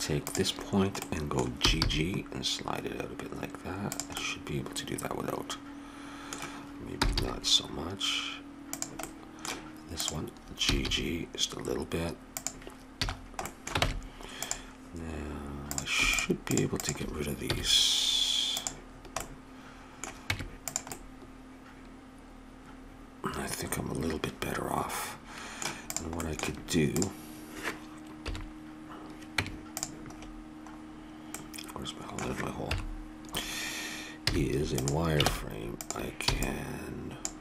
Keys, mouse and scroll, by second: 0.2-2.0 drag, 1.6 g, 4.2 middle click, 6.9 g, 9.0 middle click, 10.0 click, 10.6 g, 11.0 click, 12.9 a, 13.8 ctrl+Tab, 17.5 x, 19.0-20.3 middle drag, 20.3 Tab, 21.1 middle click, 21.5 middle click, 22.5 middle click, 25.9-28.7 drag, 28.2 KP_7, 29.4 Tab, 30.7-32.9 middle drag, 32.6 KP_7, 34.3 z, 35.2 ctrl+Tab, 36.3 b.